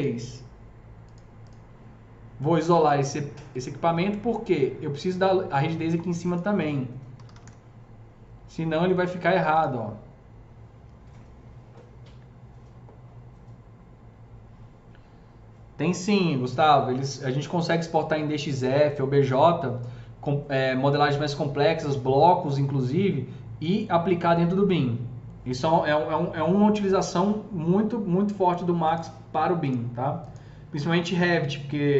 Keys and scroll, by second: 2.6 alt+q, 6.8-7.7 typing.